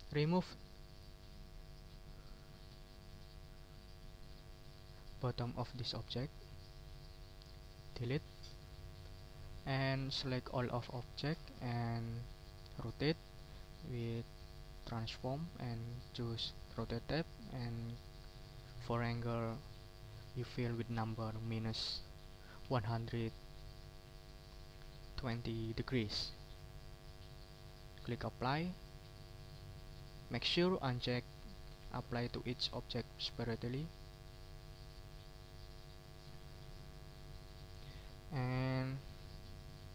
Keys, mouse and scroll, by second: 1.6 middle click, 5.5 shift+click, 6.3 shift+click, 7.0-8.0 shift+drag, 8.4 Delete, 8.7 middle click, 9.5 middle click, 10.0 ctrl+scroll down 2, 10.5 ctrl+click, 12.3 click, 14.4 click, 15.6 click, 16.9 click, 17.7 click, 19.2 click, 20.1 click, 21.8 -, 22.6 1, 22.9 2, 25.3 0, 28.3 click, 35.5 click, 36.0 middle click, 36.7 ctrl+scroll up 2, 37.2 ctrl+click, 37.6 ctrl+middle click, 39.8 click.